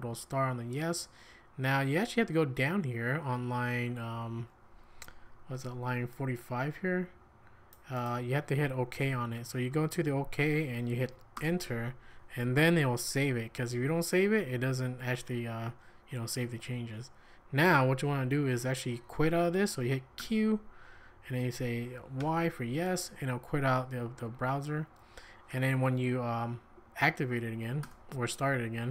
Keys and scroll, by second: 0.0-1.8 typing, 3.4-4.2 typing, 9.0 k, 9.7 k, 10.0 j, 11.3 Return, 20.2 q, 22.2 y, 25.2 Up, 27.8 Return.